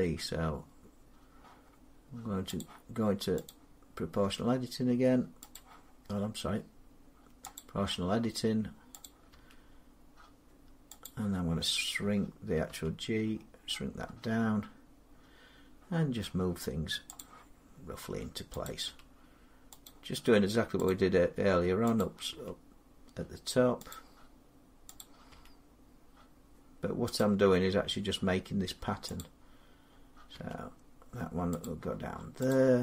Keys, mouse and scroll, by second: 2.4 click, 3.3 click, 4.1 g, 5.4 click, 7.4 click, 9.1 click, 9.2 g, 10.9 click, 11.5-12.4 scroll, 12.5 g, 13.1-15.8 scroll, 15.8 scroll, 17.0 click, 18.5 click, 18.7 g, 19.7 click, 21.8 click, 22.1 g, 23.7 click, 24.9 click, 25.2 g, 27.0 click, 29.8 click, 30.2 g, 31.5 click, 32.7 click, 32.7 g.